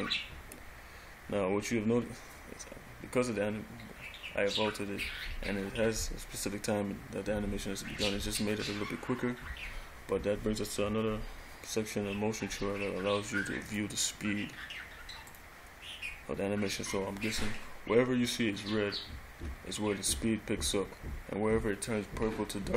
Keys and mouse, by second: 13.9 click.